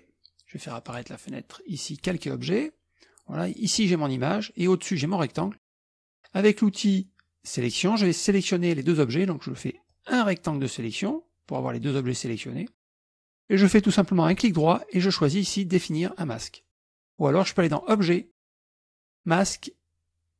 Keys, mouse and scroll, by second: 0.9 click, 2.1 click, 3.5 click, 5.0 click, 7.5 click, 9.9-11.2 drag, 14.5 right click, 17.7 click.